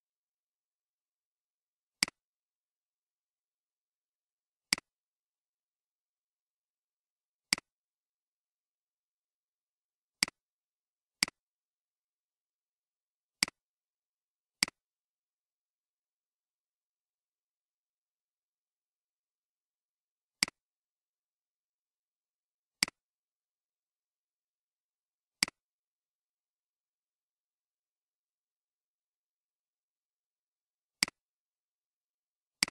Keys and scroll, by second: 2.8-3.3 typing, 5.4-5.9 typing, 7.3-8.9 typing, 11.0 typing, 15.2-16.0 typing, 21.0 typing, 23.7-24.5 typing, 26.4 typing.